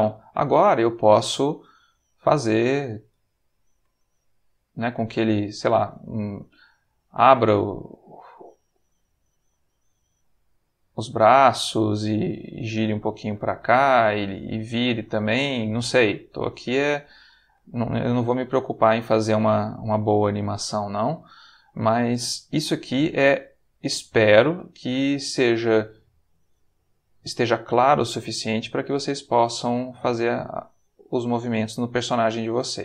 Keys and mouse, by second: 0.7 click, 1.7 r, 2.2 click, 2.8 click, 3.1 r, 3.8 Escape, 4.8 click, 6.4 click, 8.1 click, 8.8 r, 9.5 click, 10.2 click, 10.7 r, 11.3 click, 11.9 click, 12.5 r, 13.1 click, 14.1-15.4 drag, 16.6 click, 18.3 click, 18.9 r, 19.6 click, 20.3 click, 20.5 r, 21.2 click, 22.1-23.4 drag, 24.5 r, 25.7 click, 26.3 click, 26.6 r, 27.5 click, 28.0 click, 28.2 r, 28.9 click, 30.0 r, 30.6 click, 31.3 click, 32.0 r, 32.6 click.